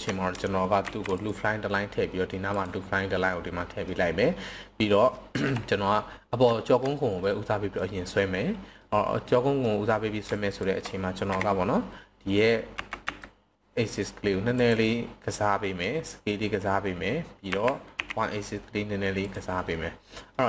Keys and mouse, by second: 0.6 ctrl+r, 2.5 click, 3.2-3.8 middle drag, 5.2 KP_1, 6.5 shift+middle click, 7.2-7.8 middle drag, 8.8 middle click, 9.4 middle click, 10.4 alt+click, 11.2 KP_7, 12.8 s, 13.0 x, 14.5 click, 17.5 s, 17.9 y, 19.2 click, 19.6-20.3 middle drag.